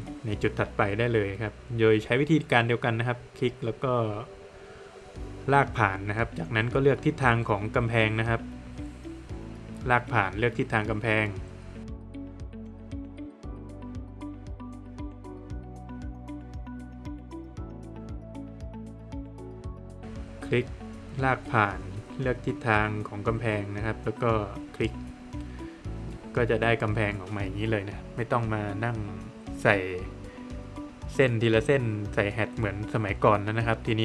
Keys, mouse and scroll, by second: 0.6 click, 1.3 scroll down 1, 1.5 middle click, 2.6 click, 3.5 scroll down 1, 3.6 middle click, 4.1 scroll down 1, 4.4 middle click, 5.0 middle click, 5.7 scroll up 1, 7.4 scroll up 1, 7.5 click, 7.7 scroll down 1, 7.9 middle click, 9.4 click, 12.9 middle click, 14.0 scroll up 1, 16.5 scroll down 1, 17.0 middle click, 18.7-19.0 scroll up 1, 20.8 scroll up 1, 20.9 click, 21.2 scroll down 1, 21.3 middle click, 23.0 click, 25.0 click, 25.8-26.2 scroll down 1, 26.2 middle click, 26.6 space, 27.0 Escape, 28.0 click, 29.4 click, 30.0 scroll up 1, 31.2 space, 32.0 click, 33.0 scroll down 1, 33.5 middle click.